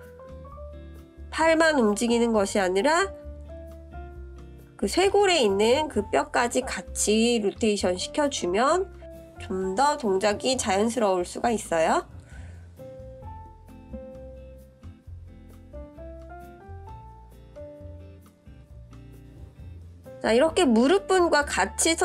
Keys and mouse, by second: 0.6-1.8 drag, 3.1-5.0 drag, 5.3-8.3 middle drag, 12.1-12.5 middle drag, 12.7-13.0 shift+drag, 14.9 click, 17.5 click, 18.9 click, 19.9 click, 21.7 click.